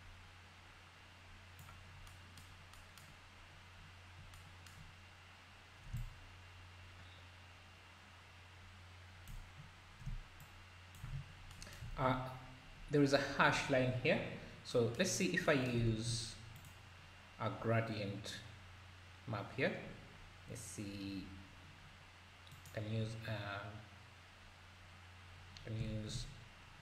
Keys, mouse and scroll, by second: 6.0-9.3 shift+drag, 10.4-11.5 shift+drag, 11.3 scroll down 4, 12.0 ctrl+s, 14.4 scroll down 3, 15.2 scroll down 1, 15.9 shift+a, 25.9 shift+a.